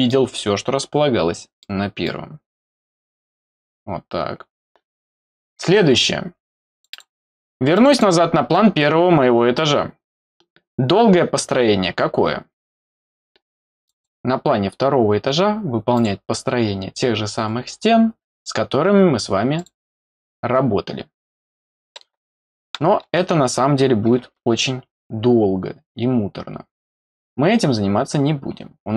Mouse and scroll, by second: 1.6 middle click, 6.7 click, 6.9 click, 7.7 click, 9.2 scroll down 1, 13.8 click, 15.9 click, 17.5 scroll up 2, 19.5 click, 28.5-28.8 scroll down 2.